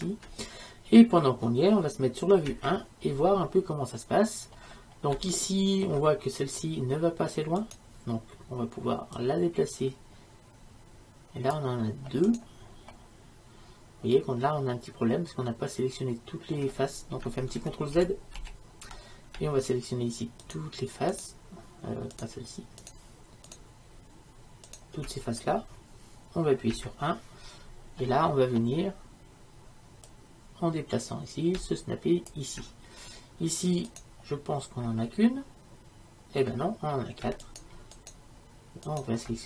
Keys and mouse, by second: 0.3-2.6 middle drag, 2.6 KP_1, 7.7-9.5 right drag, 9.5-11.6 drag, 12.4-18.0 right drag, 18.0 ctrl+z, 18.5 ctrl+z, 20.5-26.7 right drag, 26.8 KP_1, 30.2-32.4 drag, 34.0-35.4 right drag, 35.4-39.4 middle drag.